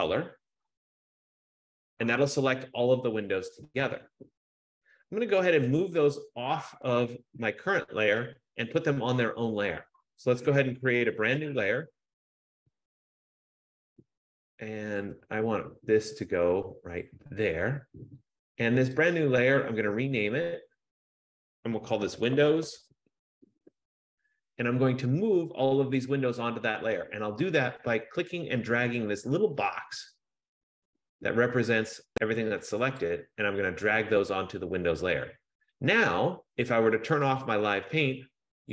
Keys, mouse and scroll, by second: 1.6 click, 6.0 click, 12.9 click, 14.4 F15, 17.1 click, 18.4 click, 19.3 click, 20.3 click, 20.5 click, 23.6 super+Return, 33.1 click, 37.6 click.